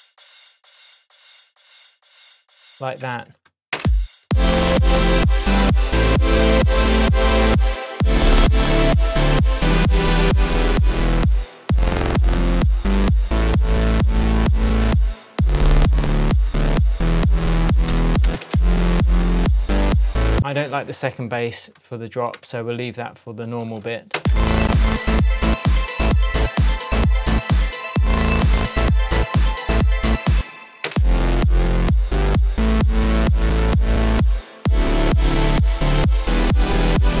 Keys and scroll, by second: 3.0 space, 17.9 BackSpace, 18.2 space, 20.3 space, 22.3 BackSpace, 24.1 space, 30.3 space.